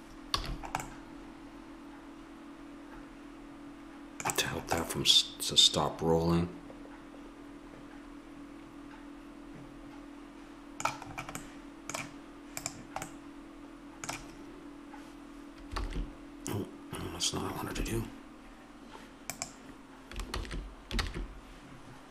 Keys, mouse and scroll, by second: 0.4 a, 0.9-2.6 middle drag, 4.8-6.1 middle drag, 11.2-12.8 middle drag, 12.8-14.2 drag, 14.2 middle click, 15.8 alt+s, 17.7 Escape, 19.2-20.4 drag, 20.4 ctrl+z, 21.0 ctrl+z.